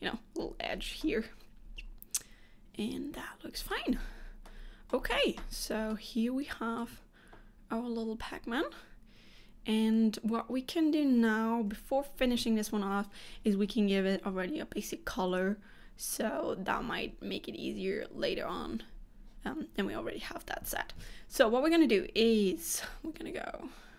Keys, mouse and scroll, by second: 1.1 middle click, 4.0 scroll down 2, 4.5 middle click, 5.5-5.9 scroll up 1, 6.0 shift+middle click.